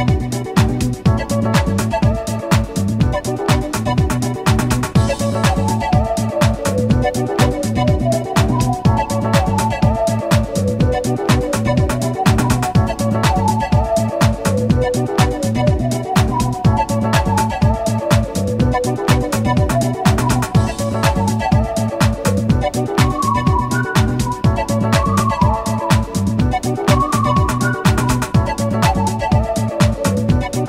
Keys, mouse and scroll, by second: 2.0 m, 2.0 2, 3.0 shift+click, 4.4 shift+a, 5.8 shift+click, 7.2 shift+Tab, 8.2-10.5 typing, 11.2 Tab, 13.1 shift+click, 13.7-14.0 scroll down 1, 14.3 scroll down 1, 15.0 scroll down 1, 15.8 click, 16.8 click, 18.2 click, 20.1 click, 22.2 KP_0, 23.6 s, 24.6 click, 25.0 g, 26.3 click, 26.7 s, 28.2 click, 29.9 shift+s.